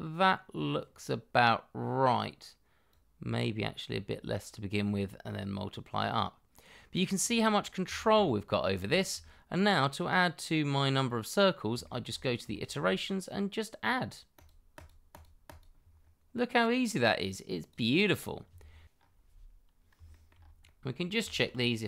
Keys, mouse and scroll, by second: 7.4-7.8 scroll down 1, 7.9 shift+middle click, 8.2 middle click, 9.2 shift+middle click, 11.8 shift+middle click, 12.1-12.5 scroll up 1, 12.5 shift+middle click, 15.7 double click, 15.9-17.9 scroll down 1, 17.9 double click, 18.9-19.9 scroll up 1, 20.1 shift+middle click, 20.3 scroll up 1, 20.6 middle click, 21.2 shift+middle click, 21.5-21.8 scroll up 1.